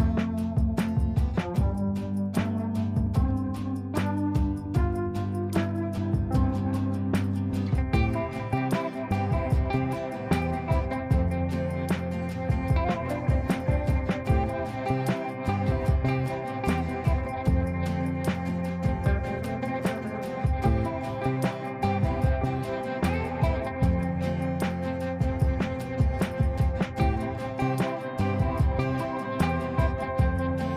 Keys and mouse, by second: 2.1-3.0 drag, 4.6 alt+b, 9.7 click, 14.9 click, 18.0 click, 26.6-28.1 drag.